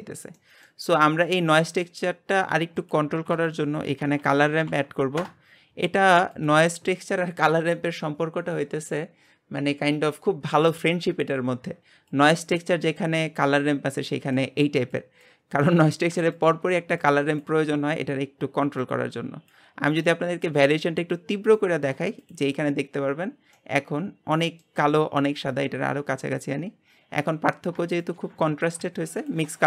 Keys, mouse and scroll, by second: 1.2-5.2 drag, 5.2 shift+a, 12.1-16.5 drag, 18.9-22.3 drag, 23.5-25.5 middle drag, 25.5-28.0 drag, 29.2 ctrl+shift+click.